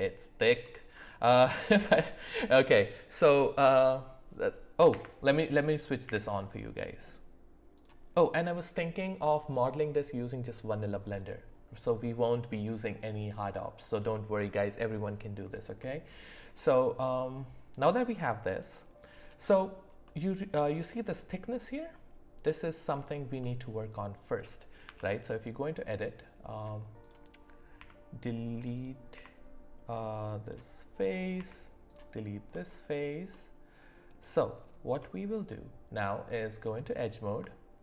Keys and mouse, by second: 0.6 middle click, 1.8 middle click, 4.9 z, 6.0 q, 8.3 click, 8.7 click, 15.8 middle click, 24.8 Tab, 26.5 click, 27.0 click, 27.8 x, 29.1 x, 31.0 click, 31.3 x, 33.3 middle click, 36.2 click.